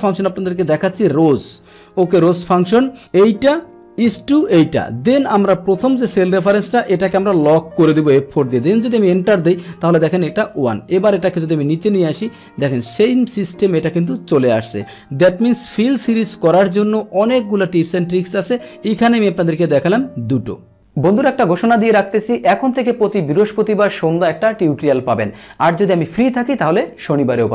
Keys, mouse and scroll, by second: 2.2 Down, 2.4 Tab, 3.0 click, 6.0 click, 6.6 click, 7.7 F4, 8.7 Return, 10.2 click, 11.0 click, 12.7 click.